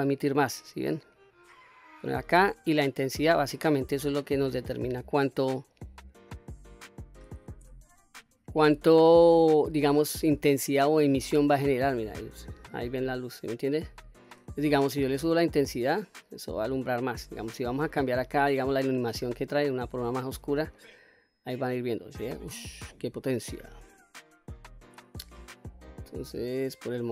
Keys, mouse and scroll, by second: 2.9-5.4 drag, 5.9-6.4 scroll down 1, 6.4 middle click, 7.7 Tab, 10.2 click, 11.1 click, 11.8-14.3 middle drag, 15.3-17.0 drag, 17.8-20.3 drag, 20.8-23.6 middle drag, 23.9-24.8 scroll up 1, 24.8-27.1 drag.